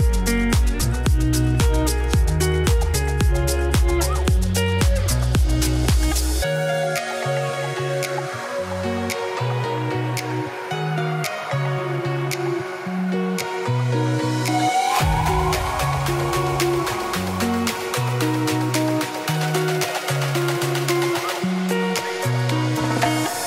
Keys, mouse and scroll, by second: 2.2-3.3 shift+middle drag, 3.3 click, 4.0 z, 4.3 middle click, 4.6 scroll up 4, 4.8 shift+middle click, 5.0 scroll down 2, 5.6 s, 9.8-11.0 shift+middle drag, 11.0 scroll, 11.0-11.6 scroll up 3, 11.2 shift+middle click, 11.6 ctrl+b, 12.5-12.8 scroll down 2, 12.8 ctrl+b, 13.6 shift+middle click, 14.2 ctrl+b, 15.6 3, 15.8 click, 15.9 f, 17.8 ctrl+r, 19.9 ctrl+r, 21.2 3, 21.3 click, 21.9 e, 22.0 Tab, 22.2-23.4 middle drag.